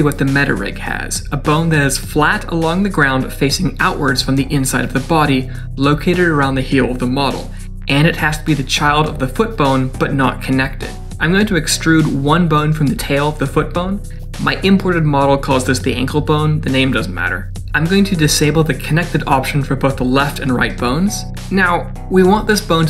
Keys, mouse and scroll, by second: 11.1 middle click, 12.3 middle click, 13.5 e, 15.7 click, 16.8 click, 19.4 click, 21.1 click.